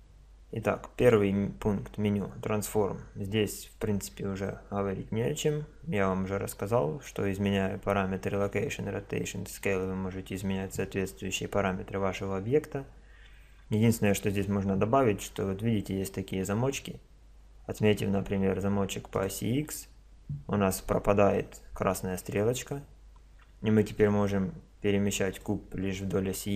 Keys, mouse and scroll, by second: 1.0 click, 13.4-15.4 middle drag, 19.1 click, 24.0 click, 26.1 click.